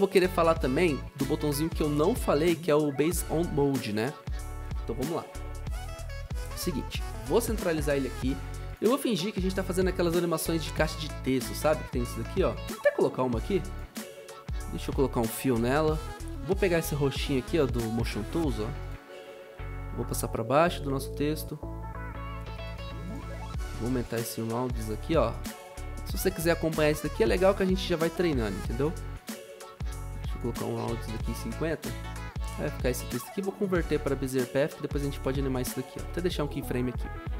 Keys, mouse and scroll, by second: 7.1 ctrl+alt+Home, 15.1-16.0 typing, 30.8-31.7 typing, 37.3 ctrl+u.